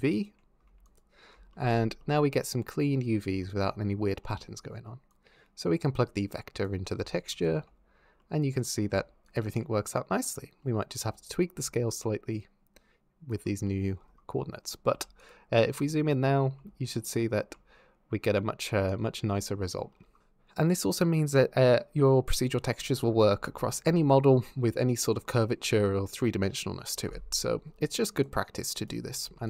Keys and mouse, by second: 0.7 ctrl+shift+click, 1.5-1.9 middle drag, 3.2 shift+drag, 4.0 click, 5.0 drag, 7.1 ctrl+shift+click, 8.0 click, 9.1 ctrl+shift+click, 9.8 middle click, 11.4-13.1 ctrl+drag, 13.5 middle drag, 14.1-14.5 middle drag, 14.7 z, 29.0 shift+Tab, 29.3 click.